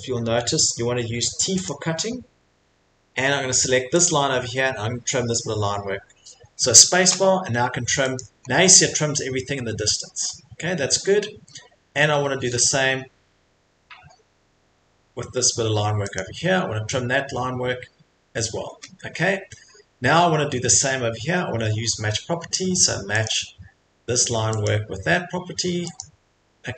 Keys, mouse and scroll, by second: 1.6 click, 4.0 click, 6.6 middle click, 12.2 click, 12.2 middle click, 16.1 click, 16.7 middle click, 16.7 middle click, 19.2-19.5 scroll, 23.2 click, 25.3 click, 26.0 click.